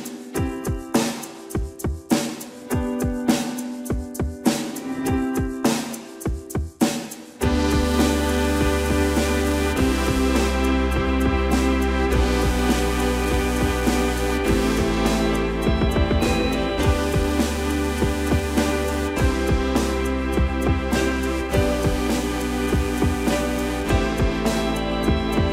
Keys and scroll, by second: 3.9 space, 4.1 Escape, 12.0 Escape, 22.0 space.